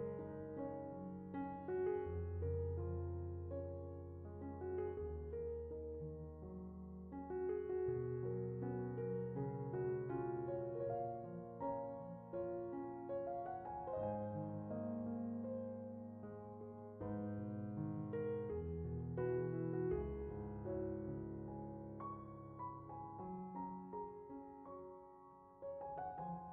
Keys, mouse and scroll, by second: 0.2 alt+click, 0.4 middle click, 1.1 alt+s, 1.4 middle click, 2.1 middle click, 3.4 alt+click, 4.0 scroll up 2, 4.2 shift+middle click, 4.7 alt+s, 5.7 alt+s, 6.1 click, 6.2 middle click, 7.0 alt+click, 7.5 alt+s, 8.8 alt+click, 9.2 alt+click, 9.3 middle click, 12.0 alt+s, 13.0 middle click, 14.5-15.3 middle drag, 16.0 middle drag, 16.3 middle click, 16.4 middle click, 16.7 Tab, 16.8 Tab, 16.9 Tab, 17.0 click, 17.1-17.4 scroll up 2, 17.4 click, 17.9 alt+click, 18.1 click, 18.1 middle click, 18.3 scroll up 1, 19.4 middle click, 20.1 scroll down 2, 20.2 middle click, 20.7 Tab, 20.8 Tab, 20.9 Tab, 21.1 click, 21.3 alt+click, 21.7 alt+click, 21.9 middle click, 22.3 scroll up 2, 22.6 alt+s, 23.0 click, 23.2 Tab, 23.3 middle click, 24.1 Tab, 24.4 alt+click, 25.0 click, 25.6 shift+click, 25.7 middle click, 26.3 scroll down 2, 26.4 middle click.